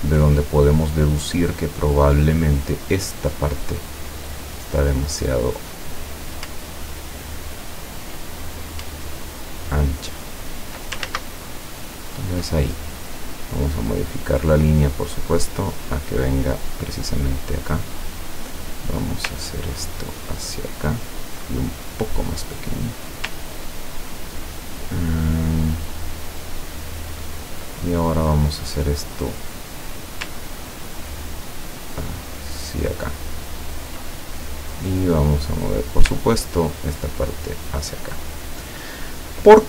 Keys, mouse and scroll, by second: 3.7 click, 4.8-5.8 drag, 6.6-8.0 ctrl+drag, 9.0-11.1 ctrl+drag, 11.1 ctrl+z, 12.3 ctrl+scroll up 2, 13.0 click, 13.7 click, 14.7-16.9 drag, 18.0 click, 18.8 click, 19.5-21.0 ctrl+drag, 21.9-23.1 drag, 23.5-23.9 ctrl+scroll down 2, 24.0 ctrl+scroll down 2, 26.7 ctrl+scroll up 2, 27.2-27.6 ctrl+scroll down 2, 28.3 click, 29.2 click, 30.8-34.1 ctrl+drag, 35.0 click, 35.7 click, 36.2-37.8 ctrl+drag.